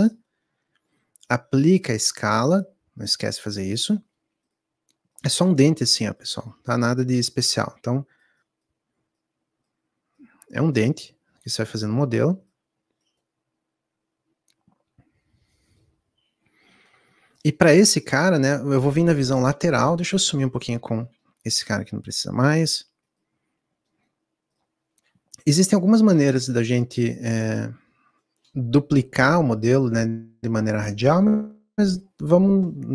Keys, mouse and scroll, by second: 2.1-6.1 middle drag, 6.1 click, 10.4-21.6 middle drag, 21.6 click, 25.5 KP_1, 25.8 KP_3, 29.7 shift+middle click, 29.9-30.9 scroll up 4, 30.2 shift+middle click.